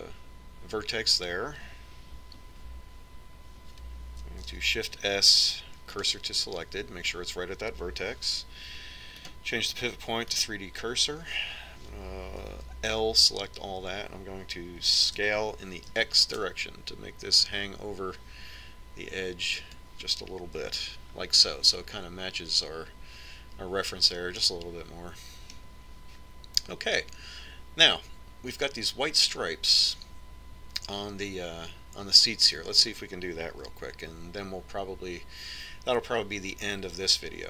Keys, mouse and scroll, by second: 0.3-2.1 right drag, 6.0 shift+s, 10.8-12.6 drag, 14.1 l, 16.8 s, 22.3 Tab, 26.0-27.8 middle drag.